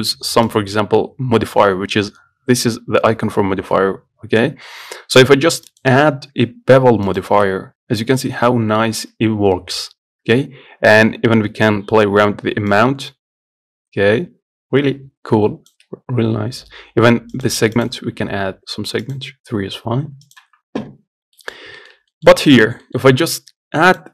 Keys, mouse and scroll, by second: 0.7 click, 5.9 click, 7.4 click, 8.0-8.4 scroll up 2, 8.4 middle click, 9.1-9.6 scroll up 1, 9.6 scroll down 1, 9.8 scroll up 1, 12.5 middle click, 13.0-15.7 shift+drag, 17.6-21.4 drag, 21.4 scroll down 2, 21.6 middle click, 21.9 scroll up 1, 22.0 shift+middle click, 22.8 click, 23.1-24.1 shift+middle drag.